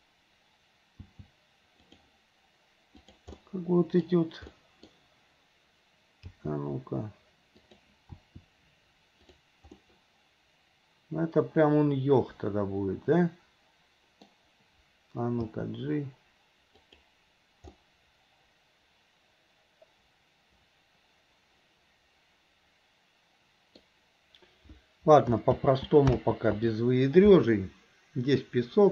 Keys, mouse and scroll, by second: 1.8 g, 3.0 click, 3.4 middle click, 4.6 middle click, 8.1 g, 9.4 r, 9.8-14.3 middle drag, 16.4 g, 17.7-23.9 middle drag, 25.7 ctrl+z, 26.2 ctrl+z.